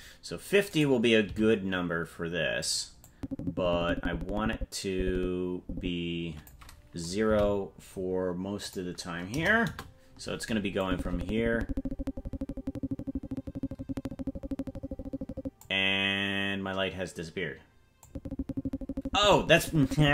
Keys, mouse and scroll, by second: 0.7 right click, 1.2 g, 3.2-6.7 drag, 7.4 Right, 8.6-10.0 drag, 10.8-15.7 drag, 18.1-20.1 drag.